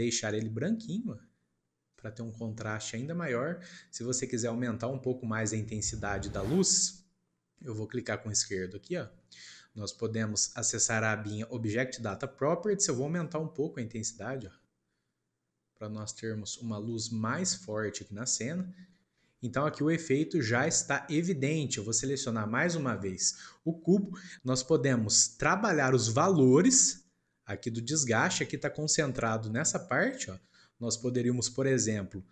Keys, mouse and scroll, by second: 2.4-3.7 middle drag, 3.7-4.1 scroll down 3, 4.1-8.3 middle drag, 8.3 click, 12.0 click, 13.1-16.2 drag, 16.7 scroll down 1, 16.8-17.9 middle drag, 17.9 scroll up 1, 18.2-23.3 shift+middle drag, 23.3 click, 24.1-25.1 shift+middle drag, 27.1-29.1 middle drag, 29.1 scroll up 1, 30.3-32.3 middle drag.